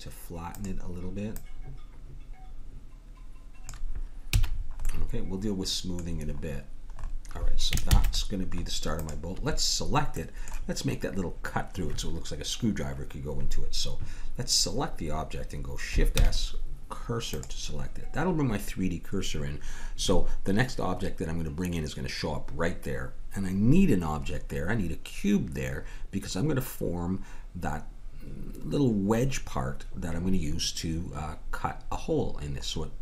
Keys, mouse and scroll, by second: 1.3-3.2 drag, 4.2 a, 4.9-7.8 middle drag, 7.9 ctrl+s, 9.0-10.9 drag, 13.3-33.0 middle drag, 16.1 shift+s.